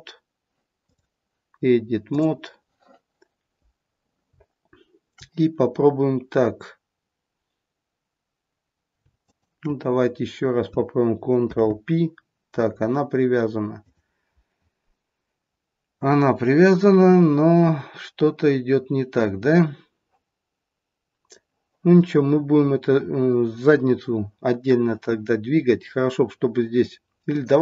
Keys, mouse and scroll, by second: 0.8 click, 9.1 shift+click, 11.4 ctrl+p, 13.7 click, 27.1 click.